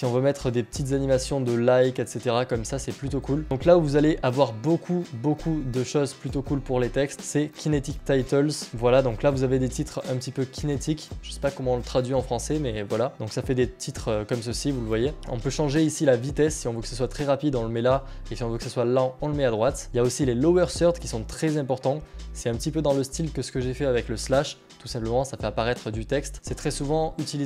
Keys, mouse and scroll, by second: 1.7-2.2 scroll up 2, 2.2-3.4 scroll down 4, 3.5-5.5 scroll down 8, 6.5-8.6 scroll down 1, 8.7-10.7 scroll up 1, 11.6 click, 13.3-17.5 scroll down 1, 20.5 click, 26.3 middle click.